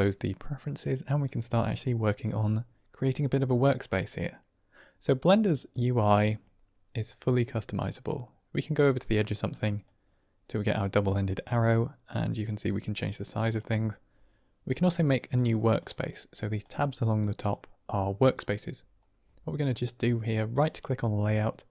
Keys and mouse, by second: 5.6-7.1 drag, 9.8-11.5 drag, 12.6-13.8 drag, 17.3 click, 20.5-21.7 drag.